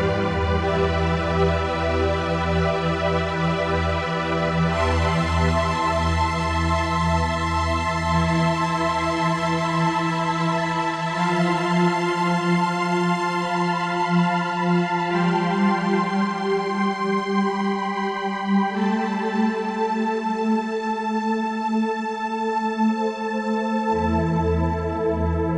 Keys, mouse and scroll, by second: 2.4 click, 4.3 shift+d, 8.2 click, 10.2 g, 12.7 click, 13.5 g, 15.0 click, 17.3 click, 22.2 click, 24.1 right click, 25.4 click.